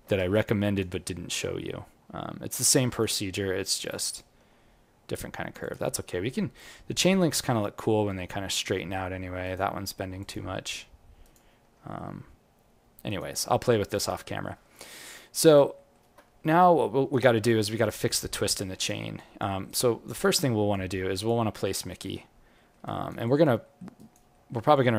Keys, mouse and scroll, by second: 0.6 click, 6.8 g, 10.6 g, 13.7 alt+middle click, 14.7 alt+middle click, 15.0 alt+click, 15.7 alt+middle click, 16.5 right click, 17.4 alt+click, 18.5 alt+right click, 19.1 alt+click, 19.6 right click, 20.3 click, 20.7 alt+click, 21.8-22.1 scroll down 1, 22.4 scroll down 12, 22.5 alt+middle click, 22.8 alt+right click, 23.2 alt+click, 23.6 alt+middle click, 23.9 alt+right click, 24.3 alt+middle click, 24.7 alt+click.